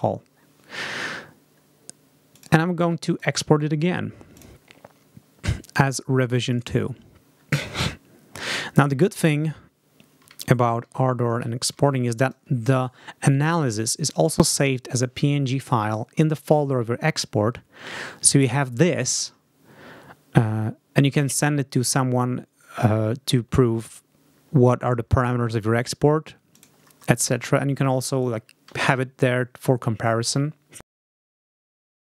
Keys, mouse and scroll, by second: 2.2 click, 2.9 click, 4.2 click, 6.4 click, 10.2 alt+Tab, 13.6 click, 26.4 click, 27.2 click, 28.6 alt+Tab, 32.0 click.